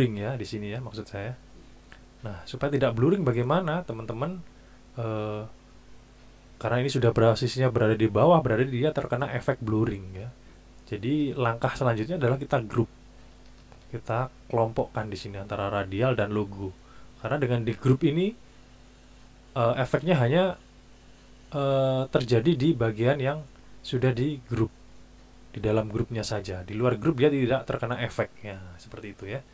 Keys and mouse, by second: 12.7 click, 14.0 shift+click, 25.0 click.